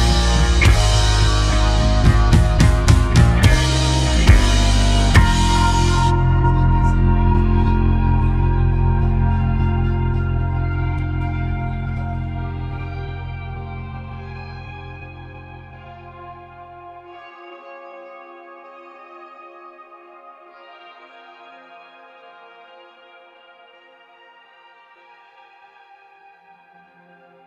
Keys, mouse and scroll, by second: 0.7 alt+h, 2.0-4.5 drag, 6.5 scroll up 1, 7.6 middle click, 8.3 3, 9.4 shift+middle click, 10.1-12.5 drag, 12.5-13.7 middle drag, 13.7-15.8 drag, 15.8 middle click, 16.5 shift+click, 17.5-20.0 middle drag, 20.8-21.5 scroll down 1, 21.5 scroll down 1, 21.7 p, 24.3-25.5 drag, 25.5-26.5 scroll down 2.